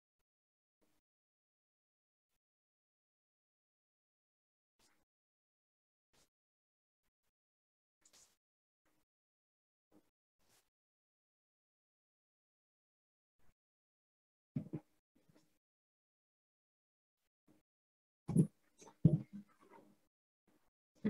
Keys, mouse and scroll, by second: 4.4-9.5 drag, 12.4-15.4 drag, 17.0-20.0 drag.